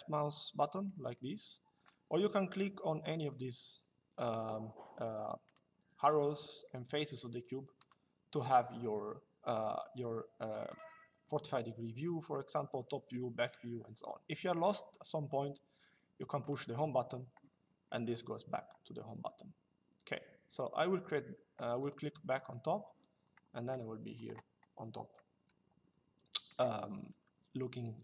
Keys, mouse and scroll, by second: 2.7 click, 5.2 click, 7.5 click, 10.4 click, 16.1 click, 21.5 click, 24.8 middle click.